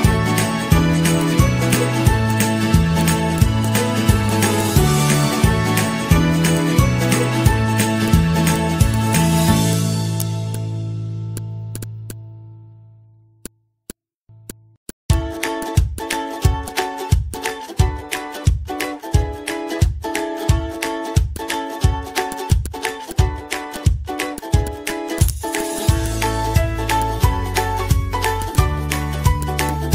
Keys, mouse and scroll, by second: 0.1 ctrl+-, 0.4 z, 0.9 ctrl+-, 2.7 ctrl+z, 3.2-7.0 typing, 12.9 c, 17.2-21.6 typing, 17.4 ctrl+a, 26.6 i.